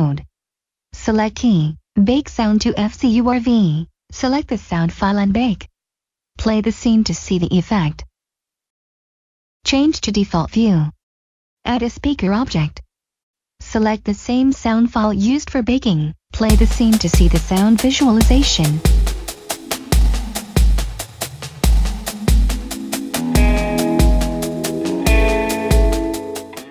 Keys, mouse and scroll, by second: 1.4 click, 3.6 click, 7.6 click, 14.8 click, 26.5 click.